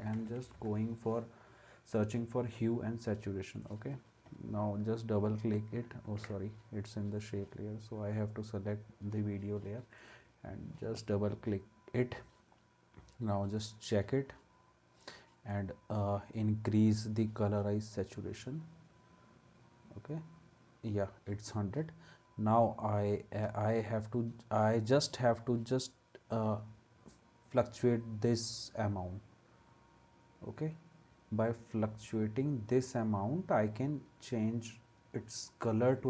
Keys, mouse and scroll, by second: 0.0-1.0 typing, 6.2 ctrl+z.